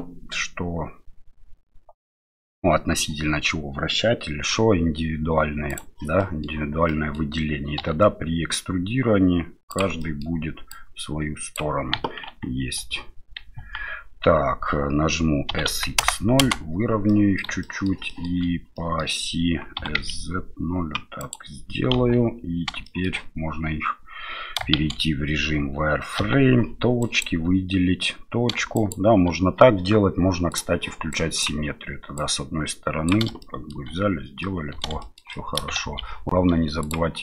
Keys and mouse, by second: 6.2 middle click, 6.9 middle click, 7.8 e, 10.2 middle click, 10.7 click, 11.9 KP_1, 12.8 KP_3, 13.6 KP_1, 15.5 s, 17.3 middle click, 17.7 middle click, 18.1 middle click, 18.9 middle click, 19.8 s, 21.9 KP_7, 22.9 shift+middle click, 24.8 shift+z, 26.2 1, 27.0 click, 28.8 click, 30.5 click, 31.3 click, 32.1 click, 33.5 shift+middle click, 34.6 middle click, 35.1 shift+middle click, 35.5 middle click, 35.8 shift+z.